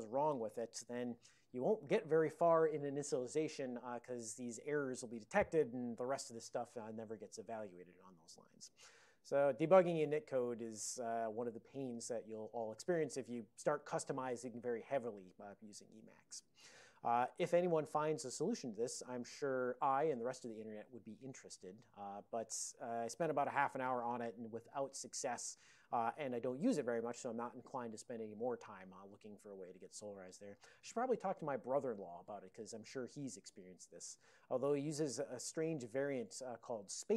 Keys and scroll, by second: 1.1 super+j.